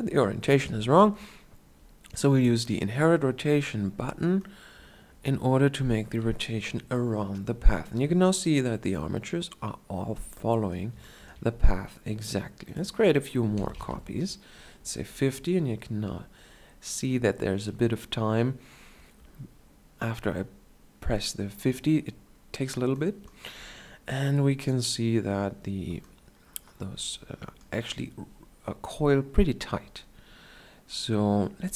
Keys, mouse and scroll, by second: 11.2-12.0 shift+scroll down 1.